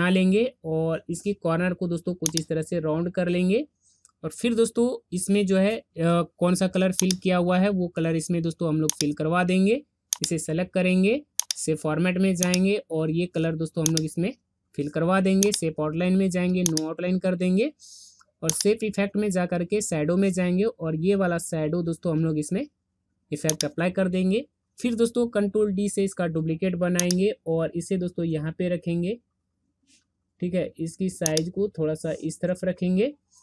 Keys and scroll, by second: 25.7 ctrl+d.